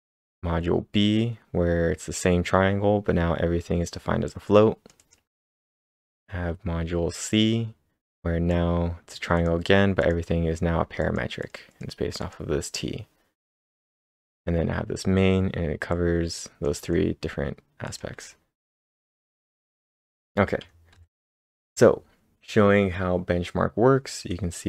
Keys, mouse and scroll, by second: 3.8 click, 3.8 scroll down 1, 5.0 double click, 5.4 scroll down 3, 6.1-8.0 scroll down 3, 8.1-8.8 scroll down 9, 8.5-10.0 drag, 10.0-11.0 drag, 11.0 click, 11.4 click, 11.7 click, 13.0-13.8 scroll down 5, 15.9-17.9 drag, 17.9-19.8 drag, 18.4-21.2 typing, 20.9 ctrl+/.